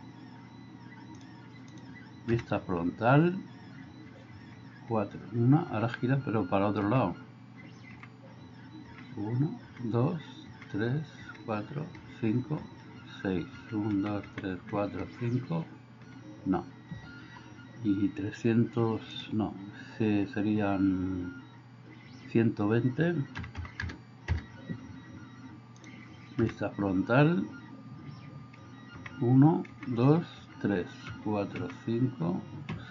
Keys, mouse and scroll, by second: 2.3 KP_1, 4.4 KP_4, 5.8 KP_4, 6.8 KP_4, 8.0-16.1 typing, 17.2 Escape, 26.5 KP_1, 29.0-31.6 typing, 32.7-32.9 typing.